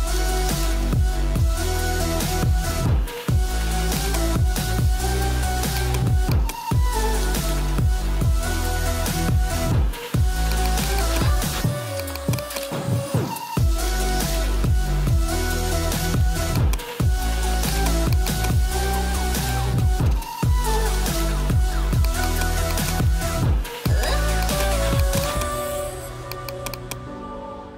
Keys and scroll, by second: 19.3-20.8 typing.